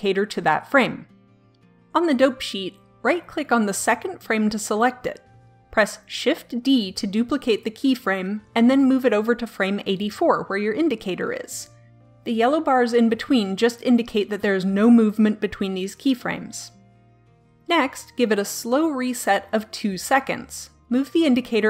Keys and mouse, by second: 0.9 click, 3.4-5.3 right drag, 5.9 shift+d, 20.7-21.6 drag.